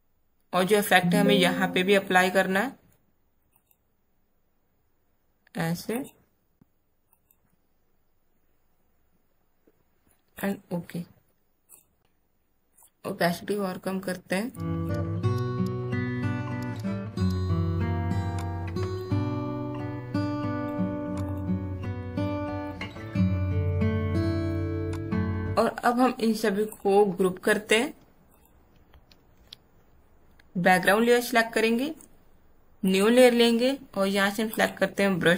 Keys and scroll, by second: 29.2 ctrl+shift+g.